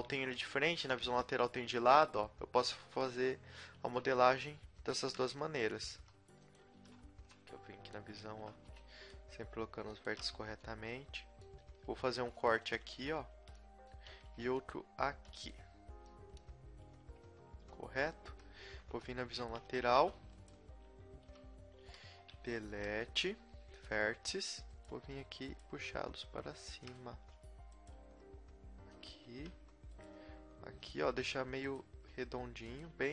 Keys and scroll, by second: 0.3 z, 1.1 KP_3, 2.8 b, 3.8 g, 5.0-7.1 typing, 8.6 b, 9.2 g, 10.1 a, 10.4 z, 12.1 ctrl+r, 13.3 a, 14.3 ctrl+r, 16.9 KP_1, 18.9-21.3 typing, 22.7 Delete, 25.5 g, 25.6 g, 27.1 a, 28.0 g, 29.3 a, 30.1 g, 31.1 a, 31.8 g, 32.9 a.